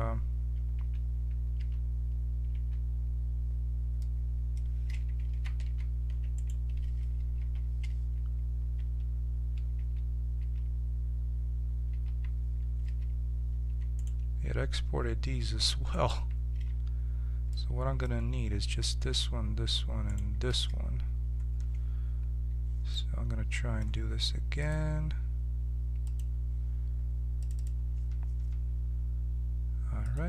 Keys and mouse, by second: 0.7 1, 1.6 2, 2.5 1, 4.1 middle click, 5.3 ctrl+z, 5.6 ctrl+z, 6.3 right click, 7.4 h, 8.7 a, 9.7 z, 10.4 z, 11.9 z, 12.8 z, 13.9 right click, 16.5 z, 20.0-22.0 drag, 22.0-24.6 middle drag, 24.6-26.1 drag, 27.6-30.2 drag.